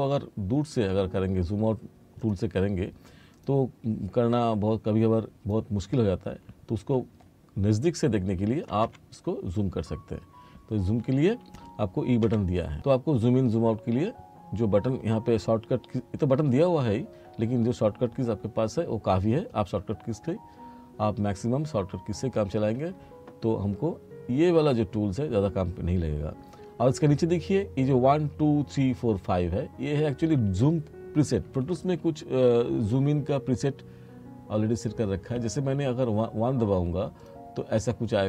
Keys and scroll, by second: 8.9 e, 12.3 e.